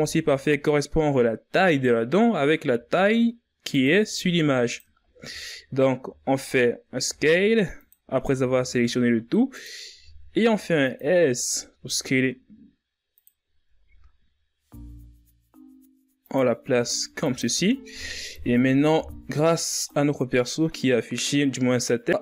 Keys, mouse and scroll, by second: 1.5-2.3 scroll up 2, 2.3 s, 3.6 g, 4.5-5.0 ctrl+scroll up 4, 5.0-5.3 shift+scroll down 2, 5.3-6.3 scroll up 5, 6.6 s, 7.7 r, 9.5 g, 10.8 s, 13.2 g, 17.1 z, 17.9 KP_3, 19.4-22.2 drag.